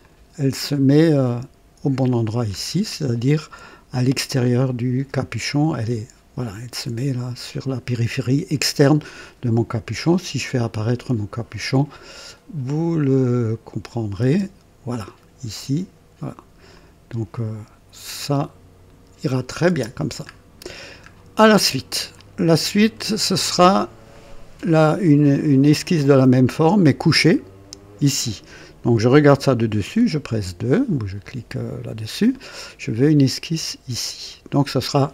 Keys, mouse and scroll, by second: 0.0 click, 0.7-2.7 drag, 2.8 scroll up 1, 11.1 click, 13.9 click, 14.2 space, 16.7-18.5 drag, 19.6 space, 19.7 space, 20.3-21.1 scroll down 2, 22.2-23.3 drag, 24.1 click, 29.8 KP_2, 32.3 right click.